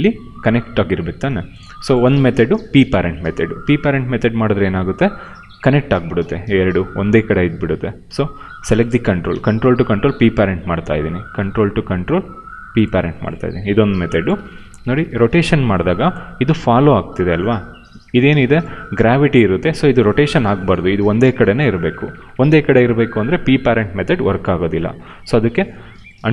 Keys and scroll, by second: 3.5 q, 8.1 w, 9.2 q, 13.8 p, 25.0 ctrl+z.